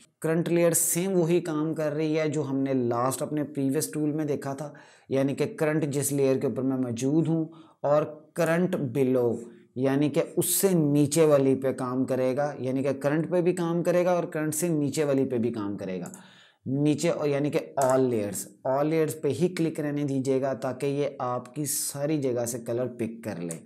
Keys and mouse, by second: 0.0 click, 8.0 click, 15.7 click, 23.4 KP_Add.